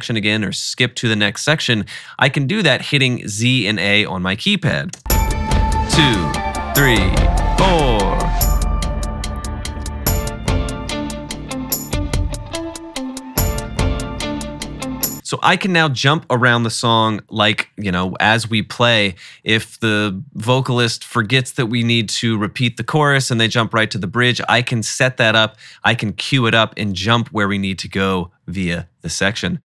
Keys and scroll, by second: 5.0 z, 7.2 z, 9.9 z, 12.8 a, 15.1 space.